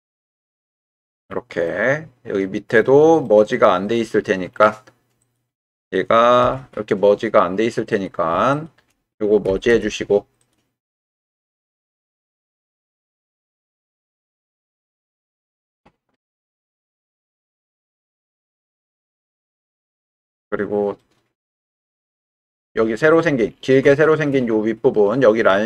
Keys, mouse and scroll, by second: 0.8 click, 1.8 middle click, 3.2 middle click, 5.2 click, 6.4 g, 9.4 m, 10.4 click, 10.9 middle click, 11.9 shift+middle click, 12.4 middle click, 13.6 shift+click, 14.6 shift+click, 15.7 g, 17.6 click, 19.4 click, 21.0-22.5 drag, 23.1 click, 24.0 shift+click.